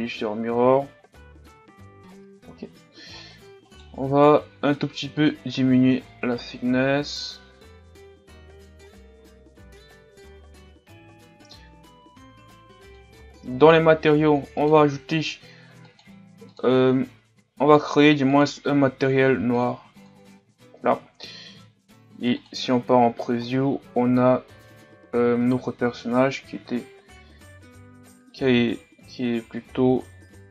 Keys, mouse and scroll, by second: 0.0 click, 0.5-1.3 scroll down 4, 1.3 scroll down 1, 1.6 a, 2.1-2.6 scroll down 3, 2.6-3.7 scroll up 9, 3.7-6.3 right drag, 6.7-9.2 drag, 9.2 a, 9.7-10.8 scroll down 4, 17.0-19.6 drag, 22.7 click, 23.4-24.2 scroll down 5, 24.2-24.6 scroll up 5, 27.1-28.3 scroll up 2, 28.3-29.0 scroll up 1, 29.0-30.1 scroll up 4, 30.1-30.5 scroll up 4.